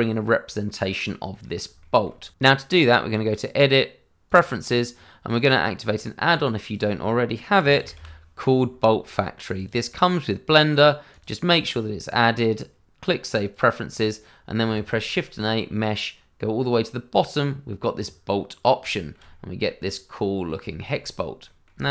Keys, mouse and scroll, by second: 1.8 shift+middle click, 1.8 middle click, 1.9 shift+middle click, 3.3 click, 7.6 b, 7.8 o, 7.9 l, 9.5 click, 10.0 double click, 11.1 click, 13.5 click, 14.7 shift+a, 17.9 click, 18.9 shift+middle click, 19.0 middle click, 19.1 shift+middle click, 19.5 middle click, 20.9 shift+middle click, 21.0 scroll up 1, 21.4 middle click.